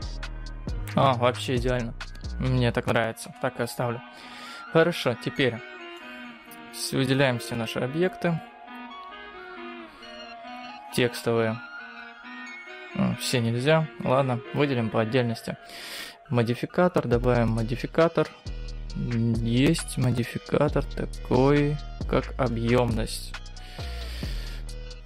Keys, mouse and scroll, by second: 3.5 KP_0, 5.1-5.6 scroll up 4, 5.6 middle click, 6.4-6.9 scroll down 2, 6.9-7.4 scroll up 1, 7.4 click, 9.2 click, 13.3 click, 14.1 click, 16.0 click, 17.0 click.